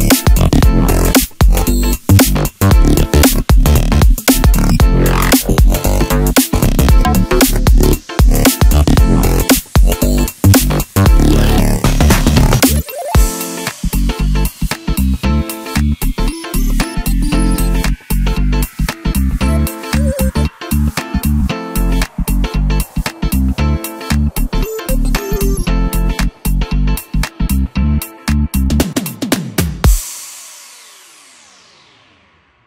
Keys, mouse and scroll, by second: 0.5-3.5 drag, 3.8 g, 12.5-15.6 middle drag, 19.2-20.7 drag, 20.7 scroll up 1, 20.7-21.4 scroll down 1, 21.4 scroll down 1, 21.7-24.7 middle drag, 26.1-27.3 right drag, 27.3-30.3 middle drag, 32.0-32.6 drag.